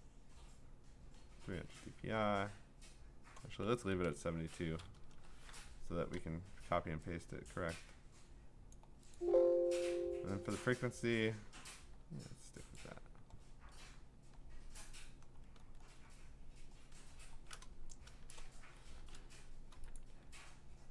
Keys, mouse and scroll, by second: 3.7-6.3 typing, 7.5-8.2 typing, 8.7 click, 9.1 click, 10.5 click, 12.8 click, 13.5-14.8 scroll, 15.6 scroll, 15.7 scroll down 10, 16.4-17.0 scroll down 8, 17.1 scroll up 6, 17.8 scroll, 18.3 click, 18.4 click, 18.9 scroll, 19.1 ctrl+z, 20.0 click.